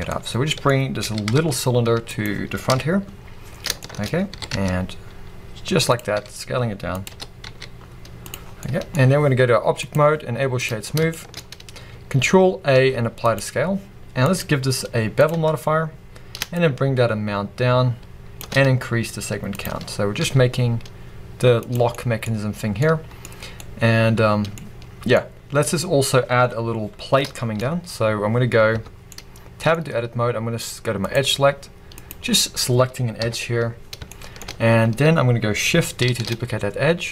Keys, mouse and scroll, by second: 0.1-2.0 middle drag, 1.0 g, 2.2 click, 2.7 KP_1, 3.2 scroll up 1, 3.8 shift+middle click, 4.1 scroll up 1, 4.3 s, 6.0 click, 6.1 s, 7.0 click, 7.1 g, 8.3 click, 8.4 scroll down 1, 8.6-9.8 middle drag, 9.0-9.8 scroll up 2, 9.8-11.1 drag, 10.8 scroll down 2, 11.1-14.2 shift+middle drag, 11.4-12.7 scroll up 2, 12.7 ctrl+a, 14.2-21.7 drag, 19.9-20.2 scroll down 2, 20.2 s, 21.9-28.7 middle drag, 22.3-22.8 scroll up 2, 24.7 scroll down 2, 26.7 scroll up 1, 28.7 Tab, 31.0-32.1 drag, 32.4-33.2 scroll down 2, 33.2 KP_3, 33.9 scroll up 2, 34.1 shift+middle click, 34.5-36.1 scroll up 2, 36.1 shift+d.